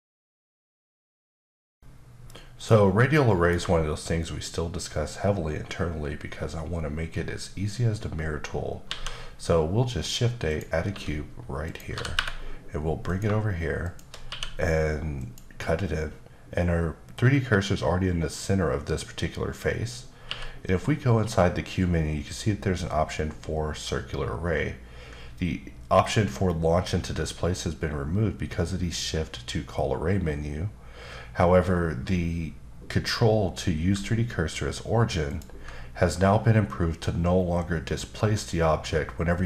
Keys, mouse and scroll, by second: 8.8 shift+a, 10.9 s, 11.6 click, 11.9 typing, 13.0 click, 13.8 shift+click, 14.2 q, 15.2 click, 20.3 q, 35.3 ctrl+click.